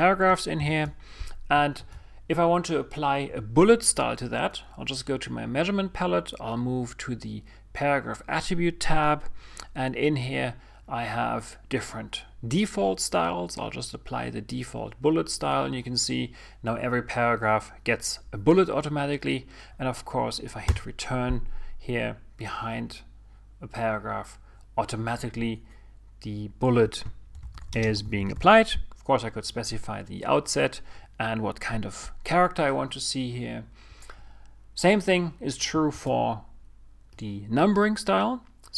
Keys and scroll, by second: 2.6 super+i, 3.8 super+a, 22.6 Return, 29.3 shift+n, 32.4 typing, 37.9 super+a.